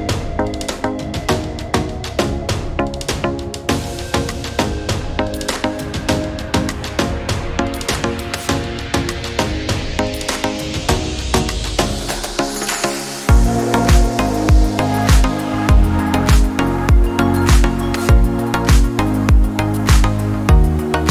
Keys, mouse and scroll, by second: 0.2 click, 0.3 drag, 0.4 click, 1.4 click, 1.6 click, 1.8 click, 1.9 click, 2.2 click, 2.5 click, 2.6-3.5 drag, 3.7 click, 3.8 click, 4.3 click, 4.4-5.4 typing, 4.5 click, 4.8 middle click, 5.0 middle click, 5.6 click, 5.8 click, 7.4 click, 7.5 click, 8.7 click, 9.0 click, 9.3 click, 9.6 click, 10.0 middle click, 10.2 middle click, 10.5 click, 10.7 click, 10.9 click, 11.2 -, 11.3 middle click, 11.6 click, 11.8 -, 11.9 middle click, 12.2 click, 13.6 click, 13.8 click, 14.2 click, 14.7 click, 15.1 click, 15.5 click, 15.6 click, 15.8 click, 15.9 drag, 16.2 click, 16.4 click, 17.1 click, 17.3 middle click, 17.8 click, 17.9 click, 18.2 click, 18.5 click, 19.1 click, 19.3 click, 19.7 drag, 20.0 drag, 20.1 click, 20.5 click, 20.9 click, 21.0 click.